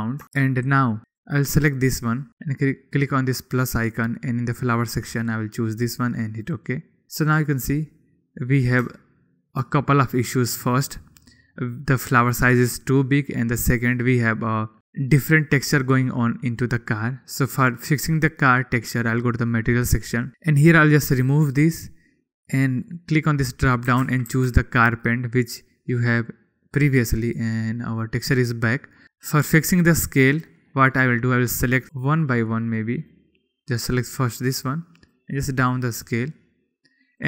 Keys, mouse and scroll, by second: 1.0 ctrl+z, 1.6 click, 4.0-7.0 drag, 9.5-10.2 shift+middle drag, 10.8 middle click, 11.9 middle click, 13.9-14.3 middle drag, 14.8 middle click, 15.8 middle click, 16.7 middle click, 20.0 click, 21.9 click, 23.4-28.7 drag, 32.5 click, 32.9 click, 33.2 click, 33.6 click, 35.8 click.